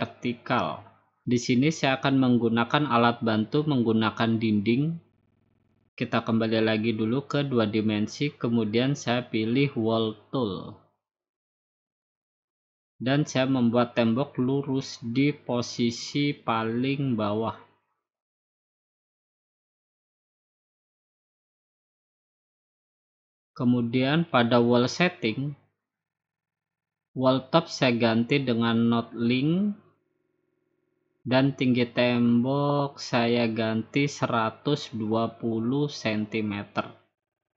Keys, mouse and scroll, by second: 0.2 click, 0.6-1.0 scroll up 2, 3.2 click, 7.1 click, 8.4-8.9 scroll down 3, 9.0-9.6 scroll up 2, 10.6 click, 11.3 click, 12.5 click, 16.9 click, 19.8 shift+click, 21.5 click, 22.0 click, 22.6 click, 24.1 click, 25.8 click, 28.8 click, 29.9 click, 33.3 click, 34.1 1, 35.3-35.8 typing.